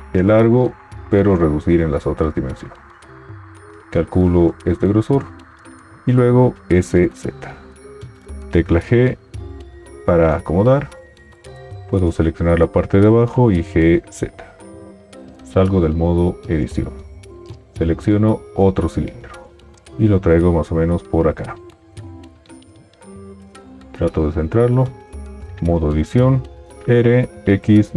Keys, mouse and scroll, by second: 6.5 s, 6.5 z, 8.2 g, 13.6 g, 13.6 z, 15.3 u, 19.8 g, 25.5 Tab, 26.9 typing.